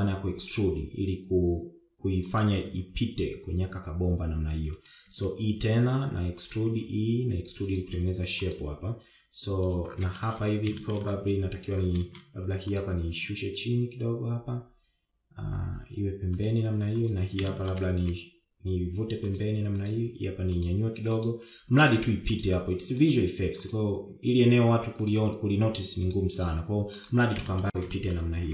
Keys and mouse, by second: 1.0 e, 6.5 e, 9.7 click, 10.0 g, 12.2 shift+middle click, 14.1 click, 14.6 g, 18.4 click, 18.8 shift+middle click, 19.3 g, 21.3 g, 22.6 click, 22.7 g, 23.6 click, 23.9 g, 25.0 click, 25.5 g, 27.6 g.